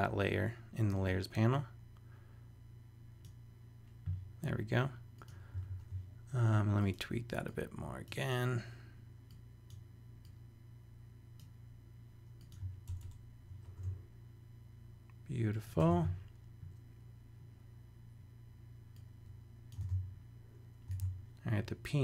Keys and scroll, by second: 5.7 super+a, 12.9 super+Return, 13.5 shift+super+Return, 13.6 shift+super+e, 15.8 super+Tab, 20.8 super+v, 21.0 super+Tab.